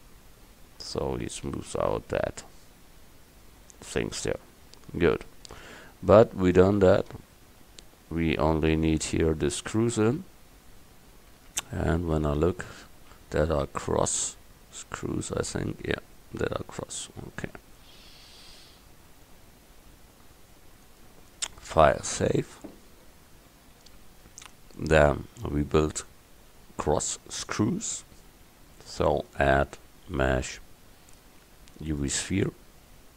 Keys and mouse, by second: 0.9-3.3 middle drag, 3.6-5.0 middle drag, 5.0 KP_1, 16.7-19.3 middle drag, 20.9-23.1 drag, 27.4-29.9 drag.